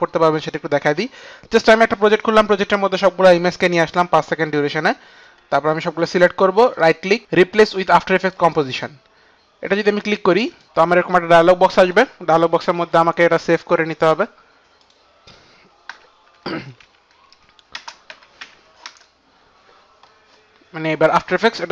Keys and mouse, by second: 5.5 click, 6.7 right click, 6.7 click, 7.1 right click, 7.1 click, 9.2 right click, 10.6 click, 14.1 click, 16.4 Right, 16.4 click, 16.9 Left, 17.8 Left, 17.8 Right, 17.8 space, 18.8 Return, 20.8 Return, 20.8 KP_2, 20.8 v.